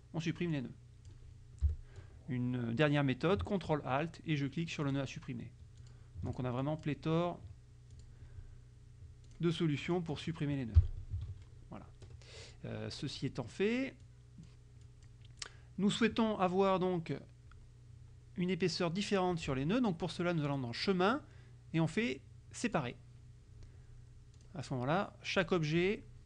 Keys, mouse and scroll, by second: 0.6 click, 1.7 Delete, 4.9 ctrl+alt+click, 5.9 ctrl+alt+click, 6.4 ctrl+alt+click, 6.7 ctrl+alt+click, 8.0 click, 9.3 click, 10.0 click, 10.8 Delete, 11.3 ctrl+a, 12.5 click, 14.1 click, 14.9 click, 15.5 click, 20.6 click, 22.8 click, 24.4 click, 25.4 click.